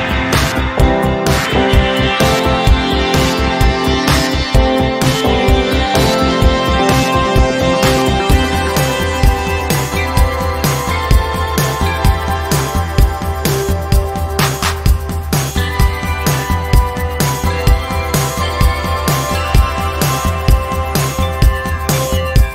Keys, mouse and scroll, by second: 0.6-0.9 click, 1.6 z, 2.9-4.1 alt+drag, 4.3 z, 5.0-5.5 alt+drag, 8.0 e, 9.1-11.0 typing, 12.0-13.6 drag, 15.9 v, 16.4-17.6 drag.